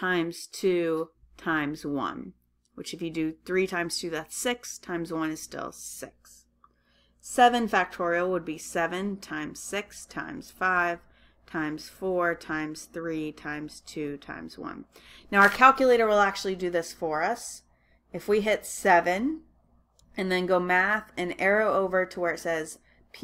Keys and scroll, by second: 18.5 7.